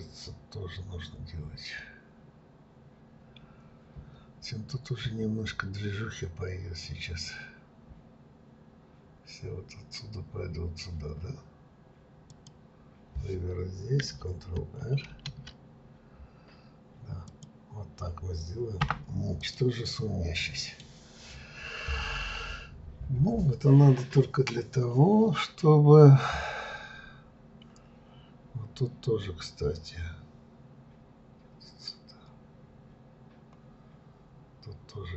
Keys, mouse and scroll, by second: 12.2 click, 15.1 ctrl+r, 19.4 click, 19.9-22.9 middle drag, 32.6-34.7 scroll up 1.